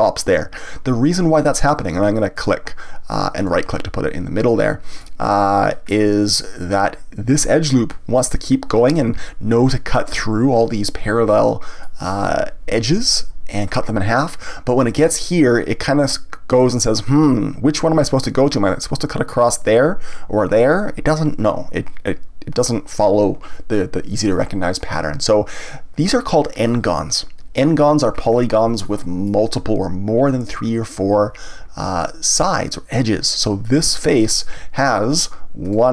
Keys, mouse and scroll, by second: 3.4 right click, 4.4-5.7 middle drag, 5.7 scroll up 1, 9.2-17.1 shift+middle drag, 22.5 scroll down 1, 24.3-27.3 middle drag, 28.1 scroll up 1, 28.8-31.9 shift+middle drag, 35.6 click.